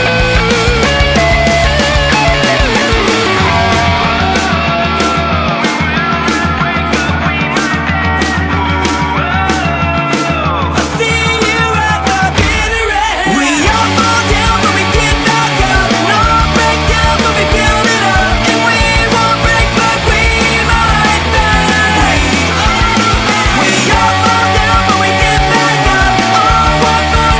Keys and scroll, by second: 10.0 ctrl+a.